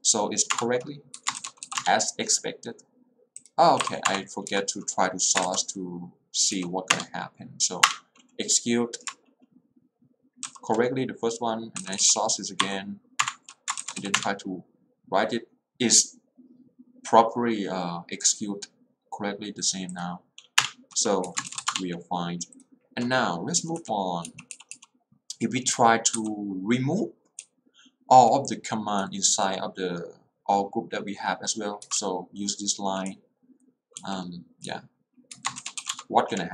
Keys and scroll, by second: 0.5 Return, 1.3 Escape, 1.6 q, 1.8 Return, 3.8 Up, 4.2 Return, 6.6 w, 7.0 Return, 11.7-12.6 typing, 12.6 Up, 13.4 Return, 14.1 w, 14.3 Return, 20.7 Return, 21.3 Escape, 21.6 q, 21.8 Return, 23.6 j, 24.4 h, 26.2 x, 27.5 l, 31.9 Escape, 32.1 h, 33.2 l, 34.1 h, 34.8 l, 35.4 Escape, 35.9 Return.